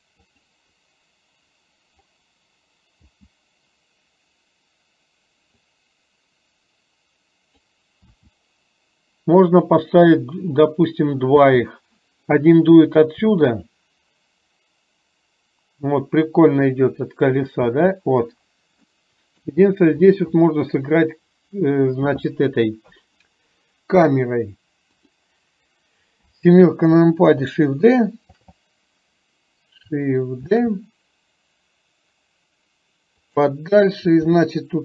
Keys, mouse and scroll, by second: 0.3 click, 3.1 space, 5.8-7.7 drag, 8.1 space, 11.6 space, 13.3 space, 17.8 space, 19.0-19.5 middle drag, 26.2 KP_7, 28.3 shift+g, 30.6 shift+d, 34.2 r.